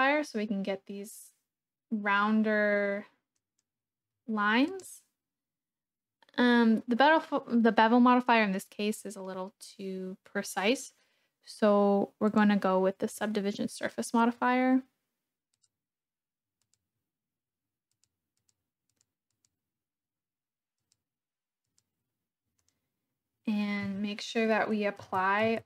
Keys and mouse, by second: 3.3 click, 4.7-12.6 drag, 15.5 click, 16.7 click, 17.9 click, 18.4 click, 18.9 click, 19.3-20.5 drag, 20.9 click, 21.7 click, 22.5 click, 24.8 Tab.